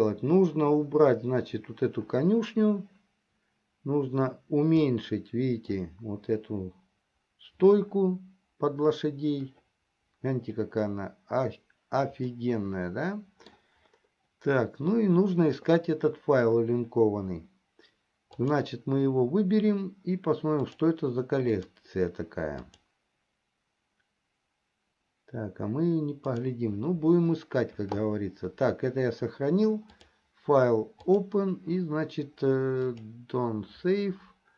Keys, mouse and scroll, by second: 5.3-6.5 middle drag, 12.9-14.1 middle drag, 18.5 click, 21.4 click, 22.8 click, 26.5 click, 30.1-33.7 drag.